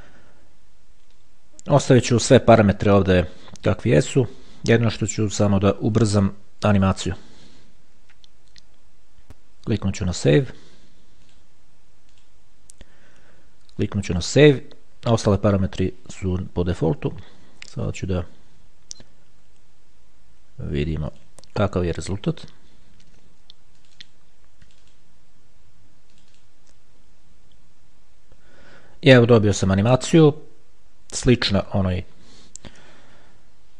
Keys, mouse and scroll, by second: 5.4 click, 7.0 KP_5, 9.3 click, 11.5 click, 12.4 click, 14.3 click, 18.2 click, 21.4 click, 24.0 click, 25.6 click, 26.4 click.